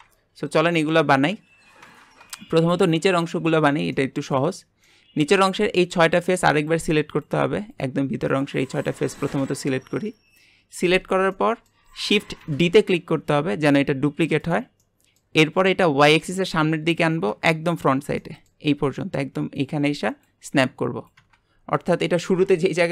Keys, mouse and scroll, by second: 0.2 scroll down 2, 0.6-1.1 middle drag, 1.1 scroll up 2, 1.8 Tab, 2.4-3.5 shift+middle drag, 3.5-3.9 scroll up 1, 3.9 middle click, 4.6 scroll up 2, 4.8-5.8 middle drag, 5.8 click, 6.6 shift+click, 7.1 shift+click, 7.7 shift+click, 8.3 shift+click, 8.8 shift+click, 9.2-12.5 middle drag, 12.5 shift+d, 14.8-16.1 middle drag, 16.1 click, 18.2 middle click, 18.7-20.2 scroll up 1, 20.2-21.7 scroll up 1.